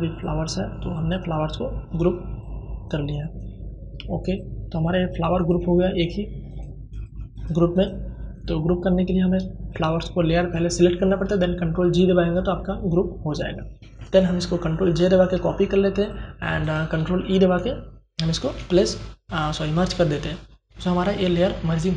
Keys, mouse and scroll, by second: 13.9 ctrl+j, 14.9 click, 14.9 click, 17.3 ctrl+e.